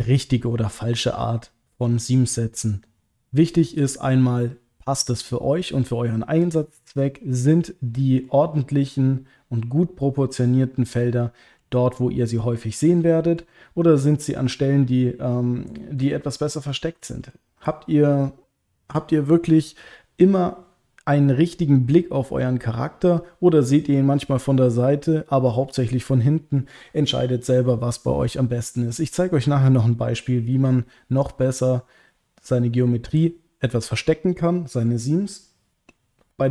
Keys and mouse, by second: 7.2-8.3 middle drag, 11.6 middle click, 12.8 middle click, 14.2-16.0 middle drag, 17.0 middle click, 28.3 middle click.